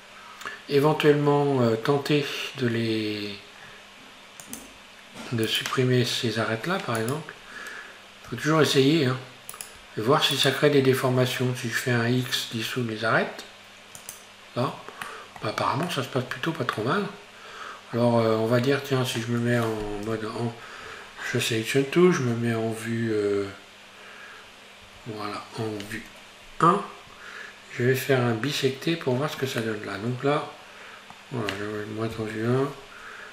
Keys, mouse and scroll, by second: 1.0 Tab, 3.6-4.5 scroll down 5, 4.5 click, 5.5 right click, 7.0 right click, 8.4 2, 9.6 right click, 10.4 shift+right click, 12.2 x, 15.1-20.2 middle drag, 20.2 a, 24.9 KP_1, 29.6-32.2 middle drag, 32.2 KP_1.